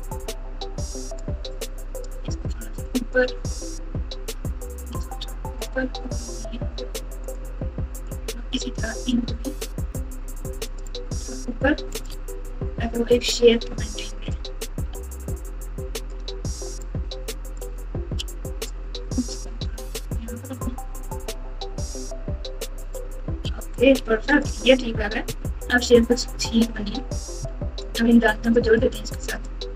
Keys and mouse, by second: 1.5 click, 1.7 click, 2.5 g, 3.7 click, 4.9 g, 8.1-9.1 drag, 9.8 g, 10.6-12.0 right drag, 12.2 alt+z, 12.8 Tab, 13.7 Tab, 14.9 alt+z, 16.8 click, 17.1 click, 18.2 g, 23.4 z, 23.9 alt+z, 24.3 click, 24.8 Tab, 25.4-26.8 typing, 28.6 shift+click, 29.3 shift+click.